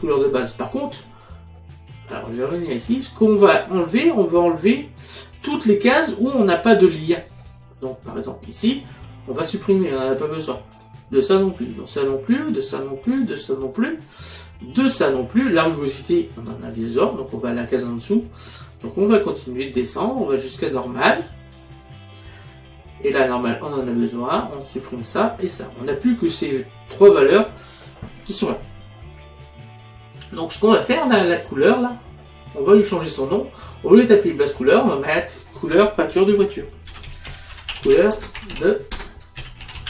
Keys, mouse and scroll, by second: 1.6 middle click, 8.5 click, 9.6 click, 10.8 click, 14.4 click, 16.8 click, 18.8 click, 23.4 click, 24.6 click, 30.9 click, 33.0 click, 34.6 click, 36.9-39.8 typing.